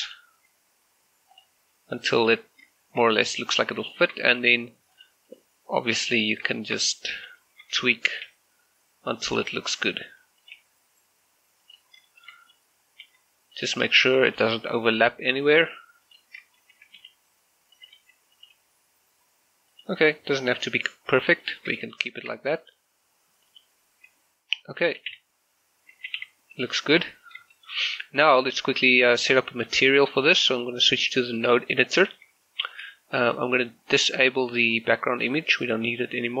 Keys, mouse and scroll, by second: 1.4 click, 1.6 g, 2.4 click, 2.6-3.0 scroll down 1, 3.3 right click, 3.9 shift+middle click, 5.0 click, 5.4 right click, 5.6-6.0 scroll up 1, 6.0 g, 6.3 click, 6.6 shift+middle click, 7.0 s, 7.3 click, 7.4 shift+middle click, 7.9 r, 8.2 click, 8.3 g, 9.4 click, 9.5 r, 9.8 click, 10.1 s, 10.5 click, 10.6 g, 11.7 click, 12.1 shift+middle click, 12.5 right click, 12.8 scroll up 1, 13.1 g, 13.6 click, 14.0 shift+middle click, 14.4 g, 15.0 click, 15.2 s, 15.5 click, 15.7 g, 16.1 click, 16.8 s, 17.0 y, 17.8 click, 18.0 s, 18.4 click, 18.6 g, 19.8 click, 20.3 s, 20.6 click, 21.2 scroll down 1, 21.5 shift+middle click, 21.8 scroll up 1, 22.2 shift+middle click, 25.0 a, 25.2 a, 26.0 a, 26.2 a, 27.0 Tab, 27.3 scroll down 1, 27.6 shift+middle click, 30.4 click, 33.4-35.7 scroll down 1, 35.7 click, 36.0-36.4 scroll up 1.